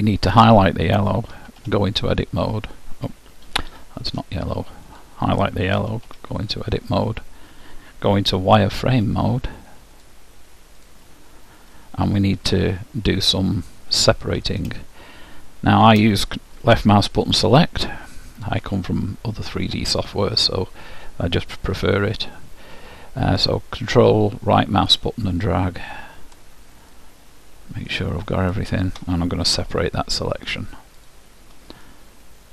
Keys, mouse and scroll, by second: 1.5 Tab, 3.6 Tab, 5.0-6.9 drag, 5.9 Tab, 10.0-11.8 drag, 11.8-13.6 middle drag, 14.9-16.7 middle drag, 24.1-26.1 right drag, 27.1-28.9 right drag, 29.8 p, 31.9-32.5 middle drag.